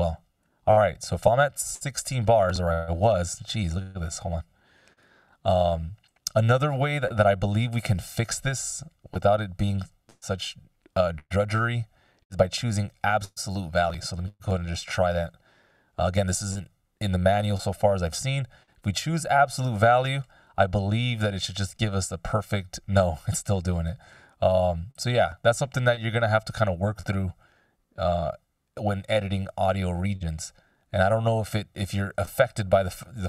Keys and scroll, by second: 4.8 super+z, 5.9 F16.